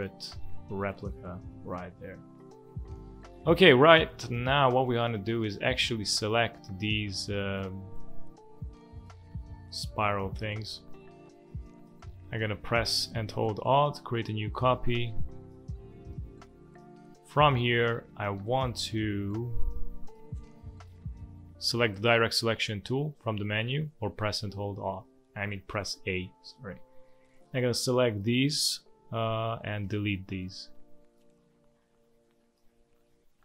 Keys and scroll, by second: 3.0 space, 3.8 space, 11.5 space, 16.1 space, 18.3 space, 29.8 Delete, 31.3 Delete, 32.6 Delete.